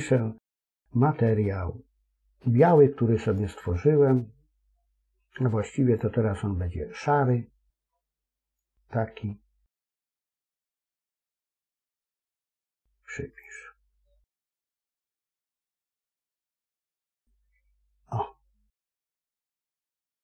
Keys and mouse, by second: 3.1 click, 5.8 click, 13.3 click, 16.1-19.5 middle drag, 19.6 middle click.